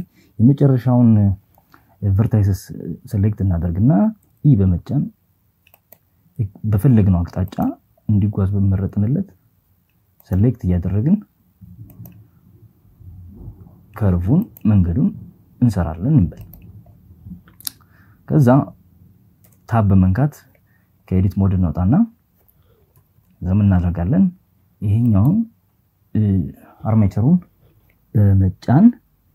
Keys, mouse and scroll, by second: 2.9 e, 4.4 click, 4.9 e, 6.1 click, 7.5 e, 8.7 click, 9.4 e, 10.6 click, 11.3 e, 13.0 click, 14.0 e, 15.0 click, 18.1 Tab, 21.5 KP_2, 21.8 KP_2.